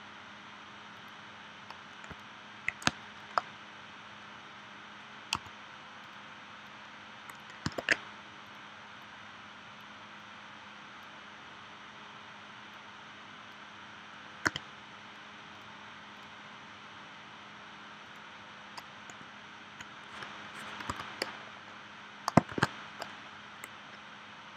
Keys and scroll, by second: 2.9 space, 5.3 a, 7.8 super+z, 14.5 v, 20.9 a, 22.5 shift+w.